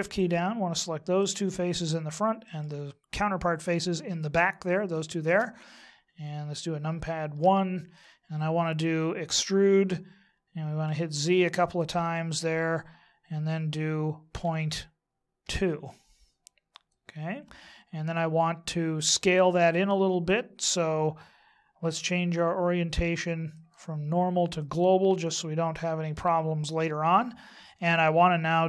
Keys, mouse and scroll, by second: 0.1 shift+right click, 1.2 shift+right click, 2.4 shift+right click, 3.0 shift+right click, 7.3 KP_1, 9.2 e, 23.5 click.